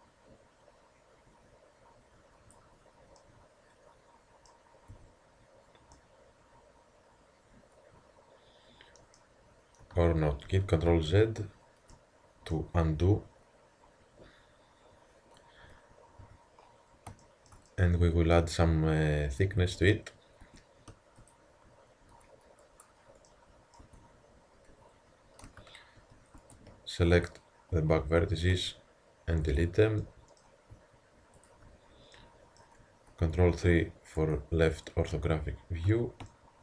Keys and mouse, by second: 3.2-3.6 middle drag, 4.9 a, 10.5 ctrl+z, 10.9 ctrl+z, 11.9-14.1 middle drag, 16.2 a, 18.8 Tab, 19.8 z, 20.5 Tab, 21.2-21.9 drag, 23.9 Tab, 25.5 z, 26.4 Tab, 27.2-28.8 drag, 28.6 x, 28.9 click, 31.4-32.2 drag, 32.2-33.4 middle drag, 33.4 ctrl+KP_3, 35.9 z.